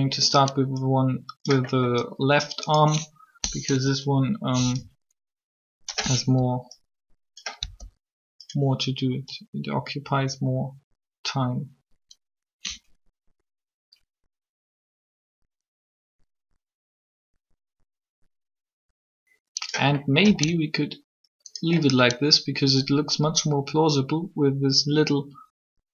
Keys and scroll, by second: 3.4 3, 7.6 r, 20.2 alt+a.